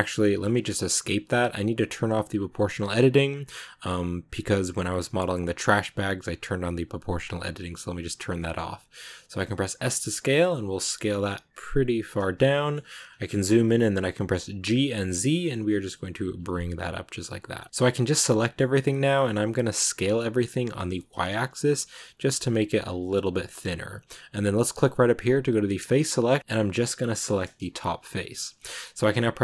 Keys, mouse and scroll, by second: 7.5 click, 8.2-9.3 middle drag, 9.3 s, 12.4 middle click, 12.6-14.0 scroll up 8, 14.5 g, 16.4-17.7 middle drag, 17.7 a, 18.1-19.8 middle drag, 19.8 s, 25.5 click, 26.4 right click, 27.0 middle click, 27.5 g.